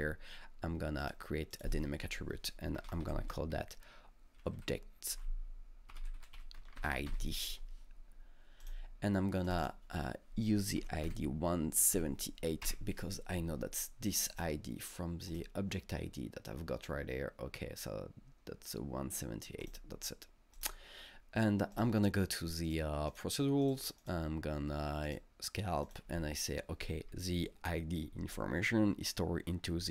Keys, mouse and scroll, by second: 1.0 click, 1.5 click, 2.6-7.1 typing, 8.6 click, 9.5 click, 9.6 double click, 10.8 KP_1, 11.1 KP_7, 11.9 KP_8, 12.6 KP_Enter, 14.3 click, 15.3 click, 19.6 click, 20.6 click, 21.7 click, 23.1 click, 23.6 click, 24.0 click, 25.1 click, 25.9 click.